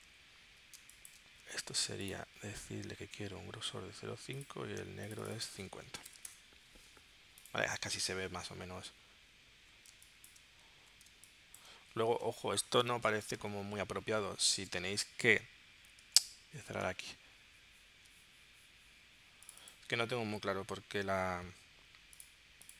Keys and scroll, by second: 0.8 space, 5.8-6.7 typing, 9.9 space, 11.1 space, 14.0 super+Tab, 16.4 super+w, 17.1 super+Tab.